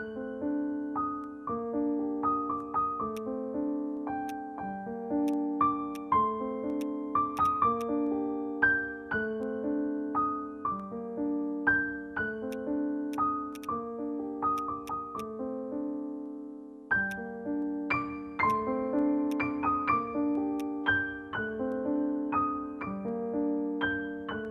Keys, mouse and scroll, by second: 2.4 scroll up 1, 4.2 alt+middle click, 4.2 alt+click, 5.3 alt+click, 5.7 alt+middle click, 5.9 alt+click, 6.2-6.9 scroll down 1, 7.4 double click, 11.3 ctrl+z, 13.6 double click, 14.0-14.5 scroll up 1, 16.8 alt+middle click, 16.9 alt+scroll up 1, 17.1 alt+click, 18.0 alt+middle click, 18.1 scroll down 1, 19.7 scroll up 1, 19.9 scroll down 1.